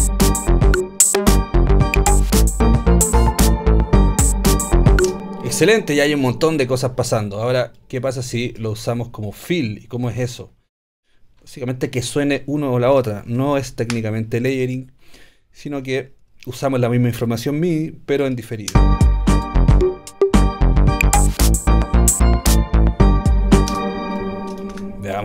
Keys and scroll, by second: 18.7 space, 23.7 space, 24.7 BackSpace.